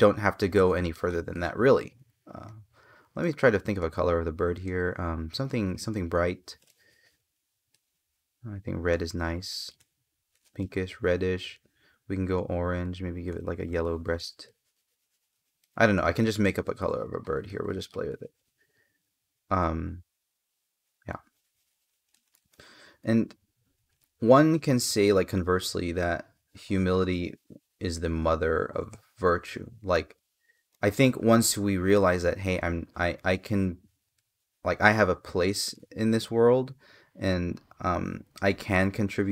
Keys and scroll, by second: 17.2 space, 28.7 space, 35.4 space.